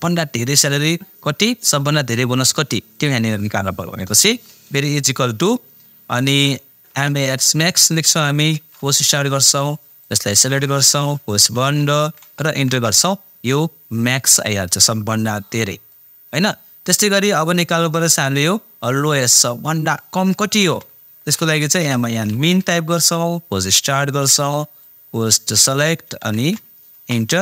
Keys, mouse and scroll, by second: 1.9 click, 4.9 typing, 6.6-8.5 typing, 10.0-12.0 drag, 12.0 shift+0, 12.6 Return, 14.3-18.3 drag, 19.3 click, 20.6-22.9 typing, 24.8-26.3 drag, 26.3 shift+0, 26.9 Return.